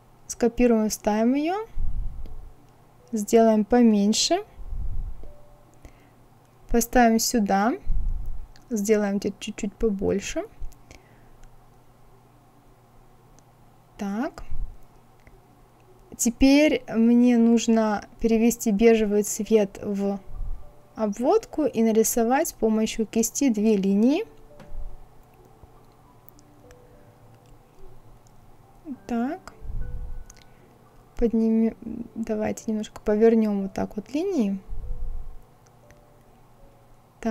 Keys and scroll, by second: 10.5 Left.